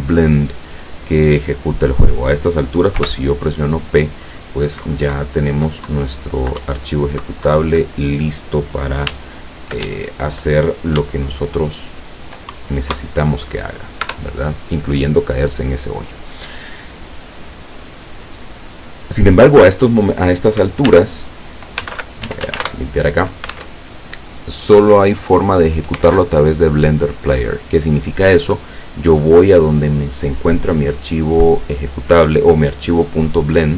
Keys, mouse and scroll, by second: 3.1 p, 5.2 Up, 6.0 Down, 6.7 Up, 7.6 Down, 9.2 w, 9.9 e, 11.1 s, 12.7 Up, 14.2 Escape, 21.0 alt+Tab, 21.9 c, 22.0 l, 22.3 e, 22.5 a, 22.7 Return, 23.7 alt+Tab, 26.2 alt+Tab.